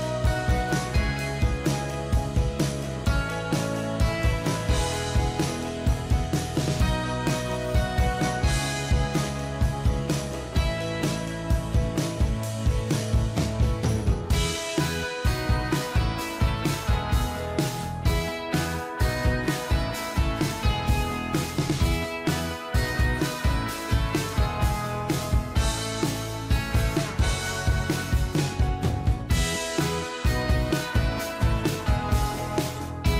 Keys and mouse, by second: 12.5 shift+click, 13.7 ctrl+g, 15.4 double click.